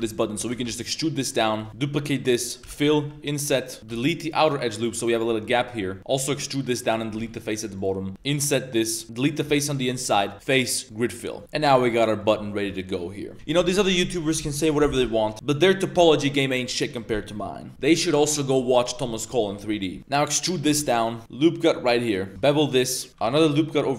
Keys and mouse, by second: 0.1 click, 0.4 g, 1.7-3.9 typing, 4.6 drag, 5.2 1, 5.4 alt+click, 5.9 middle click, 6.1 e, 7.1-9.4 typing, 9.6 alt+click, 10.3-10.9 drag, 11.4 middle click, 11.4 Tab, 11.6-12.2 middle drag, 12.3 Tab, 12.4 middle drag, 12.8 drag, 12.8 middle drag, 20.0 z, 20.1 e, 20.6 g, 21.2 ctrl+r, 22.3 ctrl+b, 22.3 2, 23.1 g.